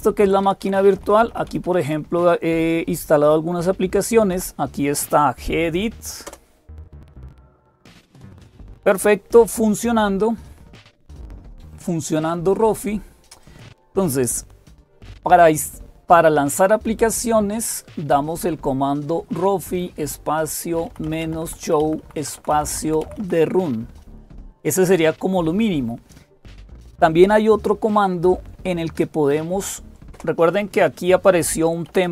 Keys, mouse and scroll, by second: 0.0-32.1 typing, 0.1 Up, 0.4 Up, 4.1 Up, 12.0 click, 14.7 Up, 17.0 Left, 17.6-18.2 Left, 20.5 Left, 20.5 Right, 20.7 Right, 20.8 Right, 21.0 Right, 30.0 Return, 31.7 Down, 31.8 Down.